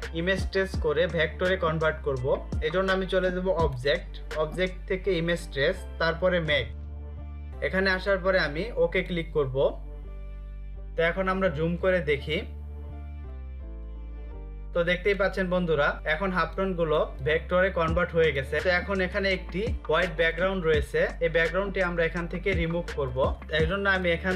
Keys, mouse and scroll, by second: 11.2 ctrl+space, 12.6-14.6 typing, 13.2 ctrl+click, 15.2 ctrl+click, 15.6 space, 15.9 space, 16.1 space, 17.2 space, 19.5 click, 22.4 ctrl+0, 23.4 click.